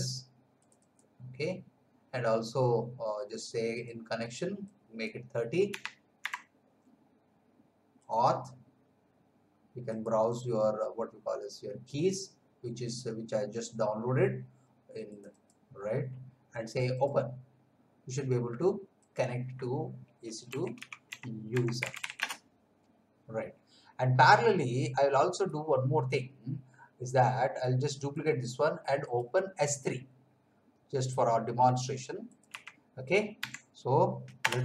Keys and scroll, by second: 5.6 3, 6.2 0, 20.2-22.4 typing, 32.5 s, 33.4 3, 34.4 Return.